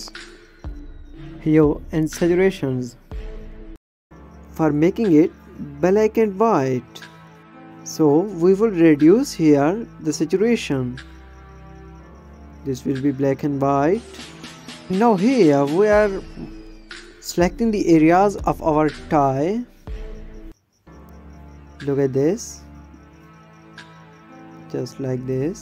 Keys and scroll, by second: 14.4 ctrl+space, 15.0 space.